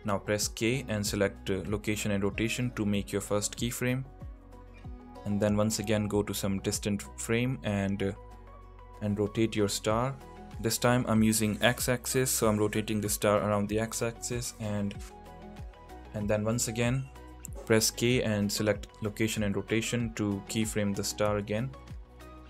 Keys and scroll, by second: 0.9 k, 9.7 r, 11.3 y, 19.0 k.